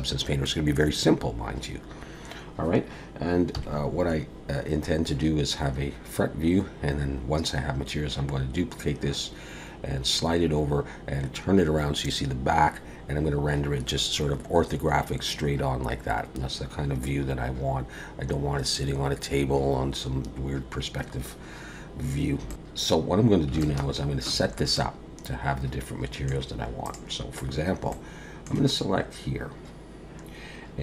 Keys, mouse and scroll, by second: 3.5 KP_1, 21.4-22.0 scroll up 2, 22.5 shift+middle click, 22.5 alt+a, 23.0-23.5 scroll up 1, 23.6 shift+middle click, 24.7 middle click, 26.8 click, 27.9 middle click.